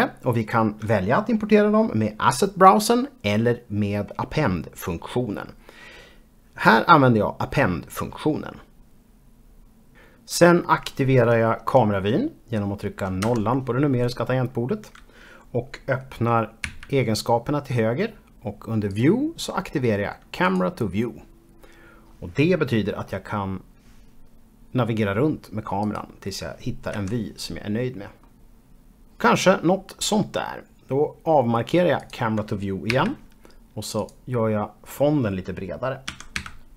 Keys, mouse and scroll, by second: 0.1 click, 0.4 p, 0.4 p, 0.9 double click, 1.2 double click, 1.5 click, 2.1 double click, 3.0-7.1 typing, 3.5 scroll down 1, 4.9 click, 5.2 scroll up 2, 6.2 click, 6.9 shift+click, 7.4 shift+click, 8.0 scroll down 3, 8.3 middle click, 8.6 z, 8.7 6, 13.3 KP_0, 16.7 n, 18.9 click, 24.2 click, 24.6 KP_Decimal, 25.0 middle click, 25.5 click, 25.8 KP_Decimal, 26.1-26.5 scroll down 1, 26.5-28.3 middle drag, 32.0 click, 32.9 n, 34.0 click, 36.1 s, 36.4 x.